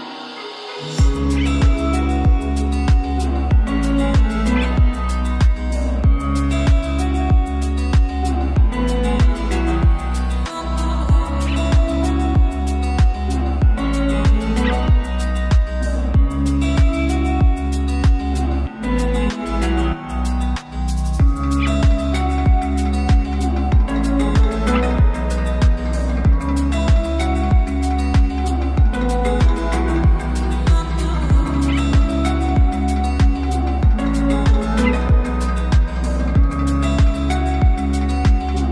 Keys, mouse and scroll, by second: 0.2-1.1 scroll down 1, 1.1 click, 5.3 click, 7.7-9.4 typing, 10.9-11.9 typing, 13.0-18.1 drag, 19.4-20.0 scroll down 1, 20.0-21.2 scroll up 1, 21.2-38.7 drag.